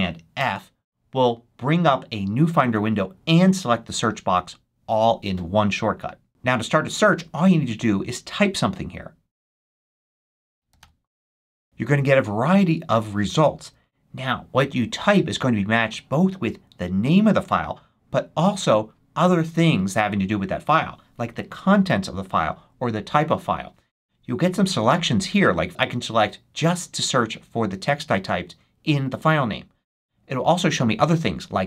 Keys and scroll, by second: 0.3 alt+super+f, 9.5-11.2 typing.